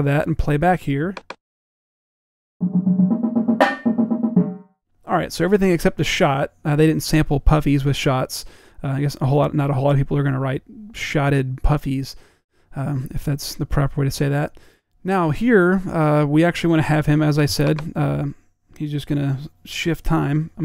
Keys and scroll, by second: 0.0-0.3 typing, 1.8 p, 3.8 p.